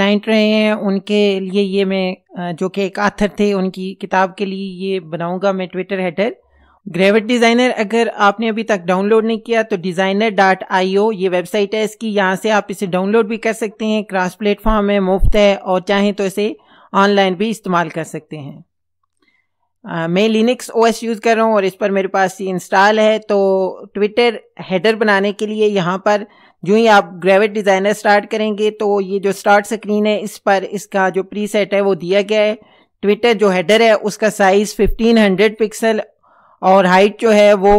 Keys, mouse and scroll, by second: 9.9 click, 18.5 click, 30.8 click, 32.4 click.